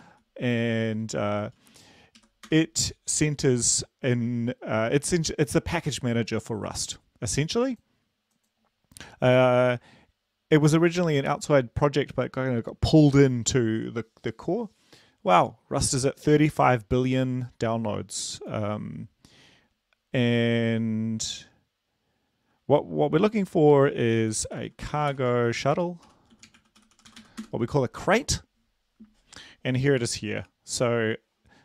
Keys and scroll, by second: 0.3-0.9 typing, 2.4 typing, 2.6 Right, 2.6 Return, 25.0-27.9 typing, 27.9 Return.